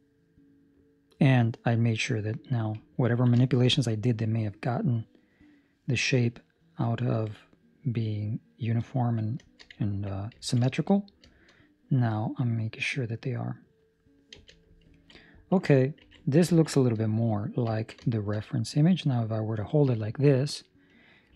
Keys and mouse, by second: 2.3 middle click, 3.0 ctrl+middle click, 3.6 shift+middle click, 3.6 middle click, 6.0 middle click, 9.4 shift+middle click, 10.4 ctrl+middle click, 10.6 shift+middle click, 10.8 middle click, 11.4 shift+middle click, 11.4 middle click, 14.8 z, 14.9 ctrl+middle click, 15.1 middle click, 16.0 ctrl+s, 16.6 ctrl+middle click, 16.7 shift+middle click, 17.0 middle click, 17.8 ctrl+middle click, 18.2 shift+middle click, 18.4 middle click.